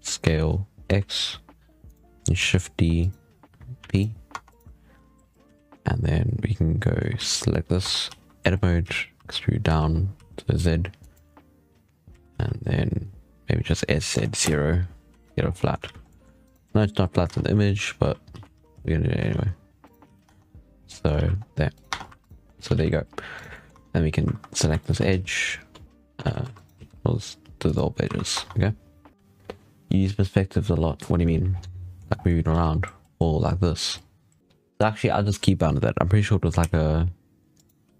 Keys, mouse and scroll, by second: 0.1 s, 2.2 shift+d, 3.7 p, 4.2 Tab, 4.3 right click, 5.3 z, 6.7-7.0 middle drag, 7.0 z, 7.7 Tab, 7.9 a, 8.7 z, 9.0 e, 12.0 s, 14.9 z, 15.1 Tab, 15.3 scroll down 5, 15.4-15.7 middle drag, 15.7 alt+a, 15.9 scroll up 1, 16.0-16.3 middle drag, 16.3 right click, 16.5 middle drag, 17.2 Tab, 17.9 z, 18.2 a, 18.4 s, 19.9 z, 20.1 Tab, 20.4-20.8 scroll down 4, 20.8-21.1 middle drag, 21.1 alt+a, 21.2 scroll up 2, 21.6 right click, 21.8 Tab, 22.0 3, 22.1 right click, 22.4 middle drag, 22.6 alt+a, 23.2 right click, 23.4 middle drag, 23.6 Tab, 23.8-24.1 scroll up 3, 24.1 2, 24.7 alt+shift+right click, 25.0 x, 25.8 alt+shift+right click, 26.1 alt+a, 26.3 3, 26.4 right click, 26.7 x, 28.0 1, 28.2 Tab, 31.4 scroll down 2, 31.5-32.0 middle drag, 32.0 scroll down 1, 32.1 middle drag, 32.4 alt+a, 32.6 scroll up 1, 34.4-36.0 middle drag, 36.5 ..